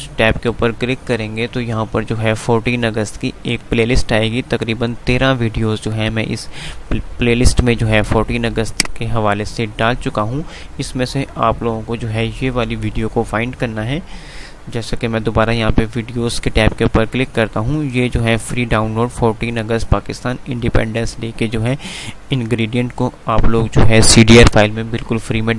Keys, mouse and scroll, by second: 3.6 click, 4.9 click, 6.0 click.